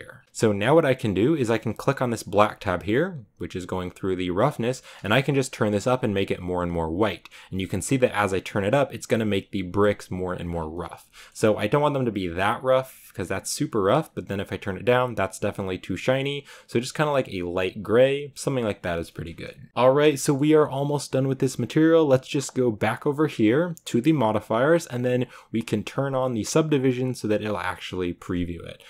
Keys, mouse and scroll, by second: 2.3 scroll down 4, 2.4-5.7 middle drag, 5.7 click, 6.8 click, 8.9 click, 10.3 scroll down 5, 10.7 click, 11.0-13.7 shift+middle drag, 13.7 click, 18.2-18.8 scroll down 2, 18.9 shift+middle click, 19.1-19.6 shift+scroll up 2, 19.6 s, 20.0-28.3 shift+middle drag, 28.3 click.